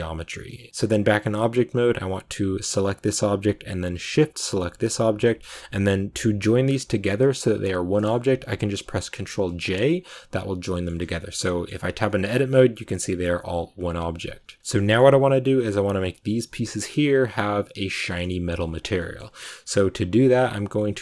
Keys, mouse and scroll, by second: 0.2 middle click, 0.5 Tab, 0.7-1.0 scroll down 2, 4.1 shift+right click, 6.7-12.0 drag, 12.0 middle click, 12.1 a, 12.4-13.7 scroll up 1, 13.7 scroll up 1, 14.0 scroll down 2, 14.1 Tab, 14.7 shift+middle click, 14.8-16.6 scroll up 2, 16.6-19.1 middle drag, 19.1-19.5 scroll up 1, 19.5-21.0 scroll down 1.